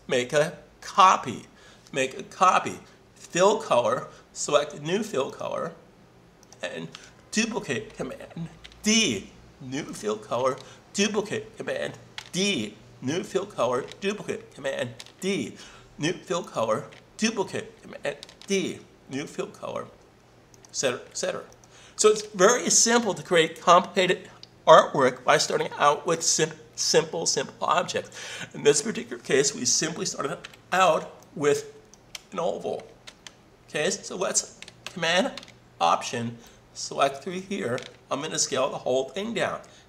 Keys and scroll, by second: 8.6 super+d, 12.1 super+d, 15.0 super+d, 18.3 super+d, 33.0 super+z.